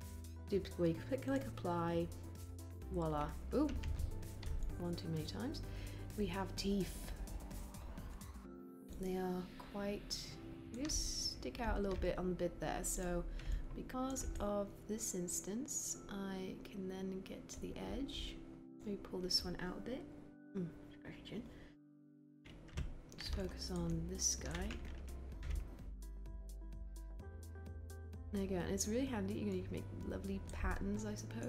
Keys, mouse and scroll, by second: 3.6 ctrl+z, 25.3 w.